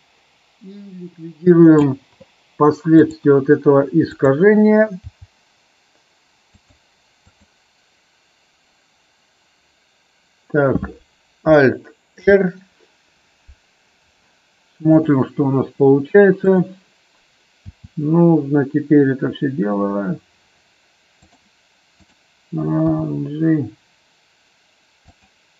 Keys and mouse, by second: 3.0 click, 4.0 click, 5.0 g, 7.1 click, 12.1 alt+r, 14.8 click, 16.4 click, 17.7 r, 21.1 click, 22.0 click, 22.9 g.